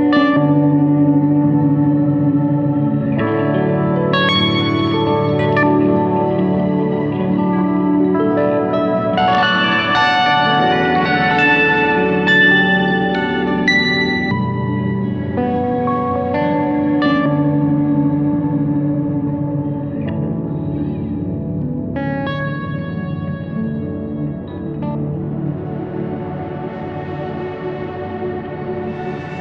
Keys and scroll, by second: 6.5-11.8 typing, 17.8 ctrl+k.